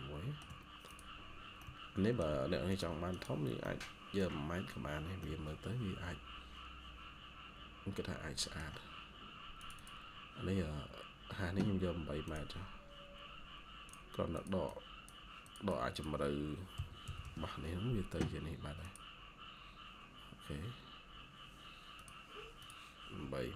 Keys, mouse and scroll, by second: 1.5 middle click, 3.0 double click, 3.5 middle click, 4.9 scroll up 1, 5.1 middle click, 8.6 shift+scroll down 1, 10.8-11.9 scroll up 1, 14.2 double click, 16.4-17.6 typing.